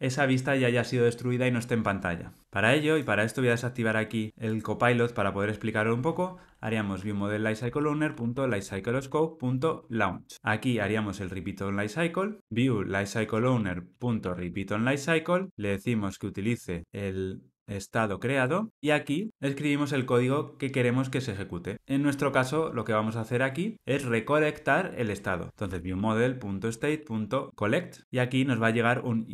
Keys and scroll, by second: 4.7 ctrl+alt+shift+o, 8.7 Return, 13.6 Return, 18.7 alt+super+l, 19.1 ctrl+alt+o, 26.6 Return, 28.0 ctrl+alt+o.